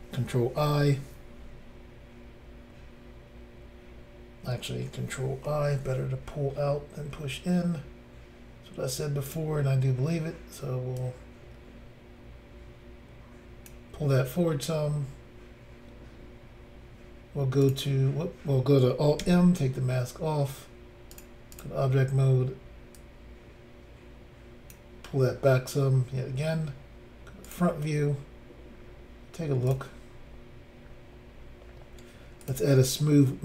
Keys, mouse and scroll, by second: 0.6 ctrl+i, 5.5 ctrl+i, 9.3 click, 9.3 click, 11.0 click, 17.6 click, 17.7 click, 19.2 alt+m, 21.1 click, 21.2 click, 21.5 click, 21.6 click, 23.0 click, 27.5 click, 27.5 click, 28.2 scroll down 3, 28.7 scroll down 1, 29.7 click, 30.8 scroll up 3, 32.4 click, 32.5 click.